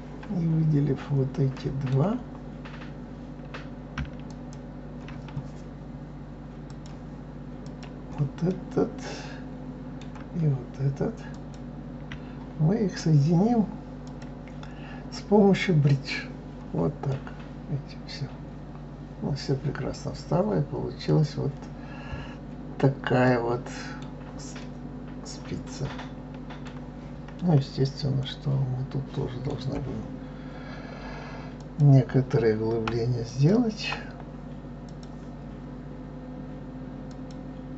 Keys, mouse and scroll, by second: 4.3 shift+click, 6.7 click, 7.6 click, 8.5-11.3 middle drag, 11.3 shift+click, 14.0-17.1 drag, 17.1-20.1 middle drag, 21.3-21.7 scroll down 2, 22.1-23.2 scroll down 3, 23.2-27.0 middle drag, 27.0-28.2 scroll up 4, 28.2-31.3 middle drag, 31.6 click, 33.2 alt+click, 34.9 click, 37.1 click.